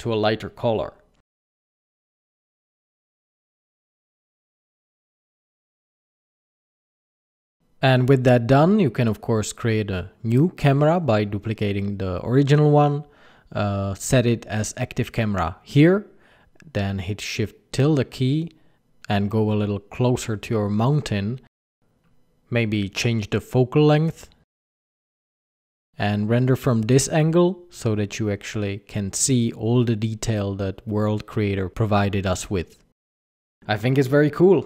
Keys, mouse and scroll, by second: 7.8 click, 7.8 right click, 9.6 shift+d, 11.0 click, 11.2 click, 11.2 click, 12.2 click, 12.7 click, 13.8 click, 14.6 click, 16.9 shift+`, 20.4-20.8 scroll down 5, 20.8 scroll up 2, 22.0 click, 22.8 click, 25.4 shift+`.